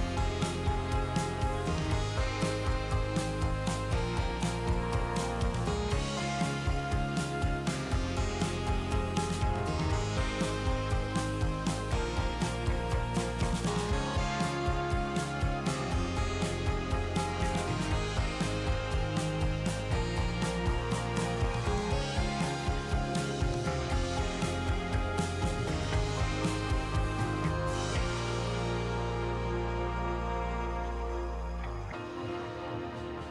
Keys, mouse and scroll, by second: 1.8-4.6 drag, 8.7-15.2 drag, 15.2 ctrl+z, 15.5 ctrl+z, 21.0 click, 22.4-26.3 drag, 26.3 ctrl+z, 27.4 ctrl+z.